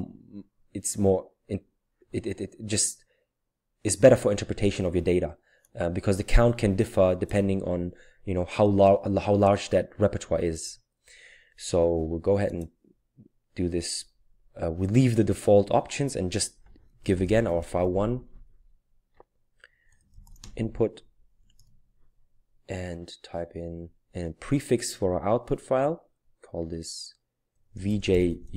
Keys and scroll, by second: 16.8-18.4 typing, 20.0 typing, 20.4 Tab, 21.4 typing, 27.6-28.5 typing.